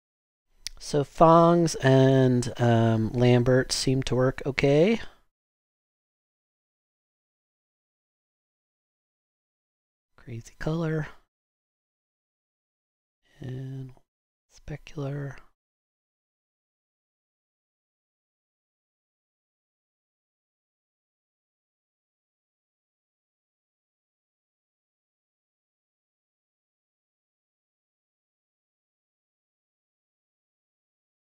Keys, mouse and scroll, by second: 21.6 click.